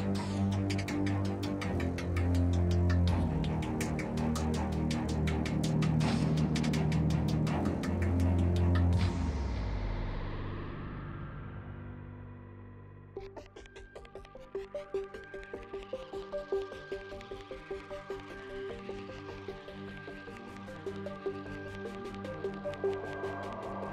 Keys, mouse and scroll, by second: 3.1 Tab, 4.6 Tab, 9.0 ctrl+Tab, 13.3 z, 15.4 z, 16.9 ctrl+x, 18.8 Tab, 19.3 Tab, 19.6 z, 20.2 z, 20.8 Tab, 21.5 z, 22.9 z.